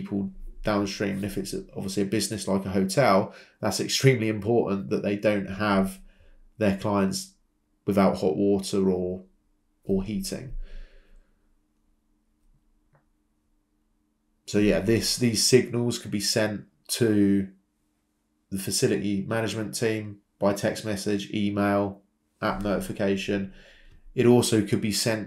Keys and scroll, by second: 20.4 Escape.